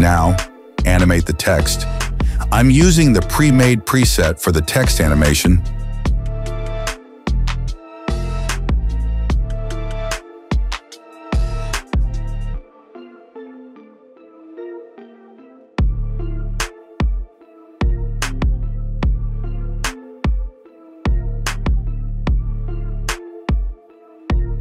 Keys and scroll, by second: 5.9-7.2 typing, 21.7 space, 24.0 space.